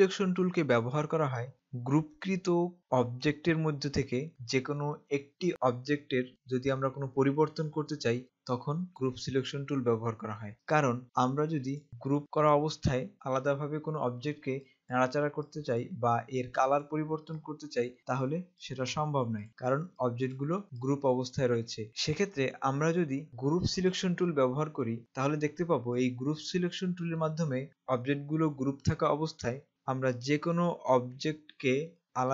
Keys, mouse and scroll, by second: 11.9 click, 24.1 click, 30.2 click.